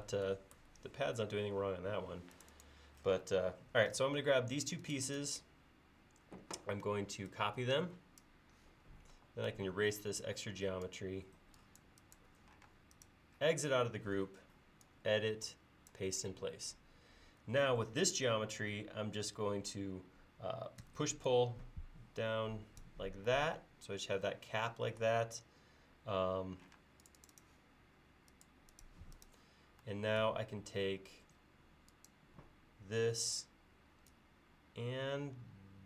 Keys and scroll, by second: 9.1 e, 12.7 space, 20.8 p, 26.8 space.